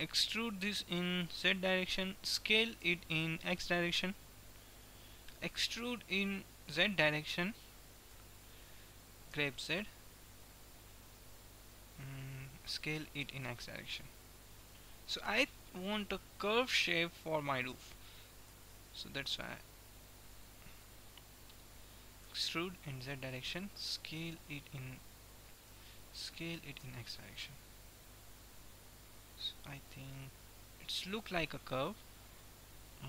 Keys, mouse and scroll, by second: 0.5 e, 3.0 s, 6.0 e, 9.4 g, 13.4 s, 16.0 e, 18.5 s, 22.4 e, 24.4 s, 26.5 s, 30.4-32.2 middle drag.